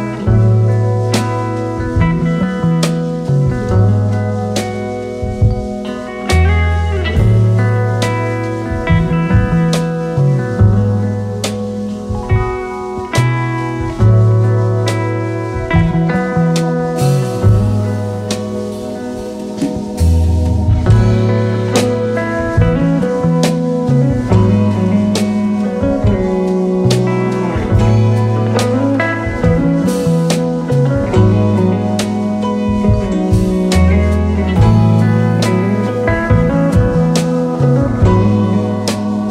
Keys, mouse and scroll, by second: 0.0 Return, 1.2 alt+scroll down 1, 1.9 space, 2.4-3.0 alt+scroll up 4, 3.1 space, 5.9 right click, 10.6-11.8 typing, 11.4 alt+scroll up 2, 13.5-16.0 alt+scroll down 10, 16.2 space, 16.7 alt+scroll down 1, 16.8-18.0 space, 18.6 double click, 31.7-32.6 scroll up 4, 35.5 double click.